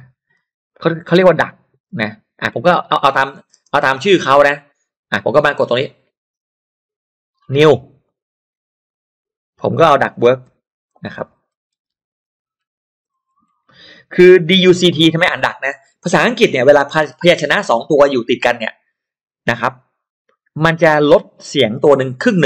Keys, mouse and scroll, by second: 1.9 space, 3.1 click, 3.5 space, 8.0 click, 9.5 click, 10.5-14.0 typing.